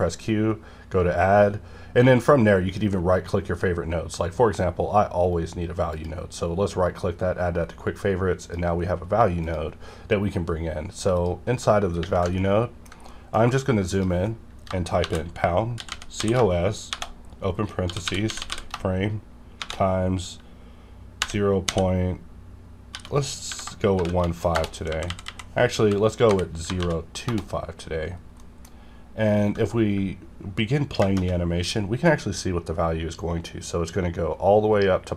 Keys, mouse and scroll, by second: 5.2 q, 5.9 click, 8.4 click, 12.4 ctrl+middle click, 13.4-13.9 scroll up 1, 13.9 click, 15.0-18.5 typing, 19.6 shift+8, 21.2 0, 22.9-24.0 typing, 24.9 Left, 25.1 Left, 26.3 KP_0, 26.8 2, 27.2 Return, 28.0 scroll down 1, 28.4 middle click, 31.0 shift+-.